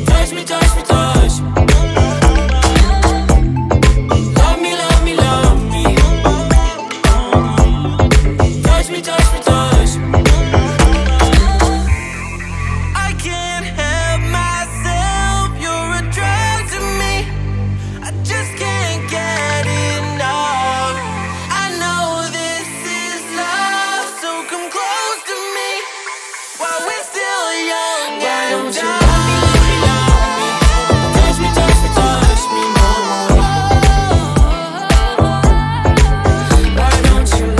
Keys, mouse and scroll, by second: 0.5-3.5 drag, 4.0 click, 5.0 click, 8.9-11.9 drag, 12.4-15.5 middle drag, 17.5-21.3 drag, 21.4-25.0 drag, 35.1-36.4 drag, 36.4 ctrl+s, 37.0-37.5 middle drag.